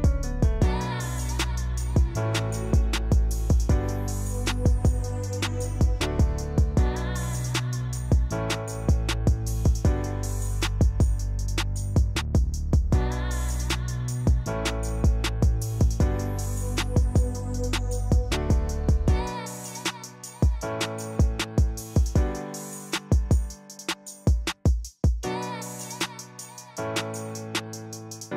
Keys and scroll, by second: 0.0-2.7 typing, 4.9 2, 5.3 Return, 9.4 2, 10.2 Return, 13.9 j.